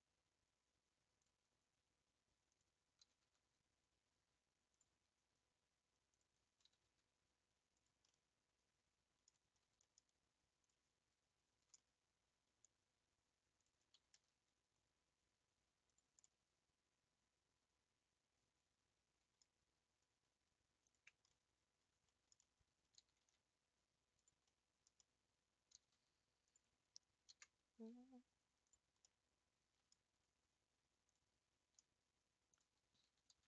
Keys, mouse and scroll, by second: 2.5 click, 3.0 g, 3.1 g, 6.1 click, 6.6 g, 6.8 g, 8.1-9.4 middle drag, 9.4-10.6 scroll up 4, 9.9 shift+middle click, 10.6 click, 11.7-13.6 middle drag, 13.6 shift+click, 14.1 s, 16.2-19.5 middle drag, 20.8 ctrl+click, 21.5-23.1 middle drag, 23.1 s, 24.5-25.7 middle drag, 25.7 g, 25.8 g, 27.5 ctrl+s, 28.6 click, 29.1-31.1 middle drag, 31.1 click, 32.5 shift+click, 33.1 s.